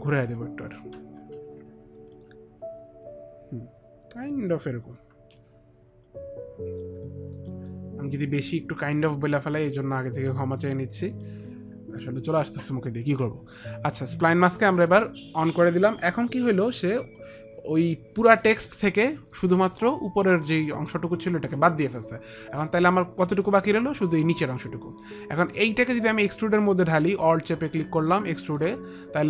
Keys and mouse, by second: 0.6 alt+click, 0.6 r, 1.7 alt+r, 1.7 alt+click, 4.8 alt+click, 5.3 alt+click, 5.3-6.4 typing, 5.6 alt+click, 6.4 click, 7.4 alt+click, 9.8 e, 9.8 alt+click, 10.8 alt+click, 11.8 alt+click, 25.4 click, 27.5 alt+click.